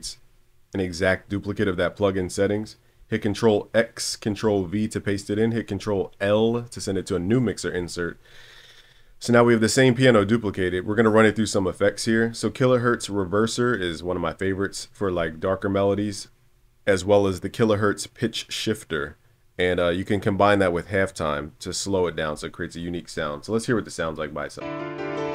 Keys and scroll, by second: 3.0 super+x, 4.5 super+v, 5.7 super+l.